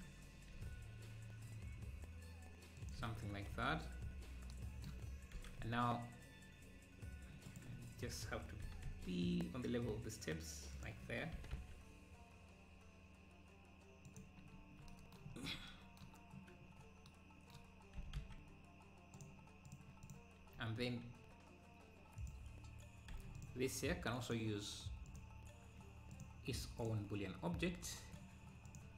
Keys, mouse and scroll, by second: 0.6 s, 3.1 `, 3.6 z, 4.1 scroll up 4, 5.4 g, 8.7 g, 9.1 g, 11.4 g, 14.5 scroll down 2, 15.3-15.7 scroll up 1, 16.7-17.1 scroll down 1, 18.0 g, 19.7 click, 22.2 click, 23.2 h, 23.4-25.3 drag, 27.8-28.9 drag.